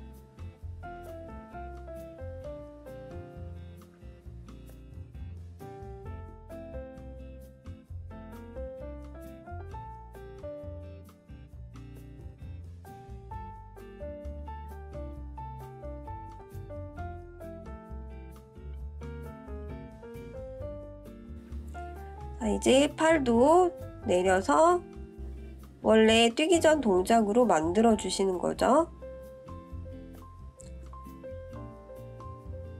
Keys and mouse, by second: 0.1 click, 1.5 click, 4.3 click, 5.3-6.6 drag, 8.1-12.5 drag, 13.2 click, 14.0-17.3 drag, 17.8-18.9 middle drag, 19.5-20.9 middle drag, 21.3-21.8 middle drag, 24.9 ctrl+KP_3, 26.5 click, 28.4 click, 29.3 ctrl+z, 29.9-32.7 drag.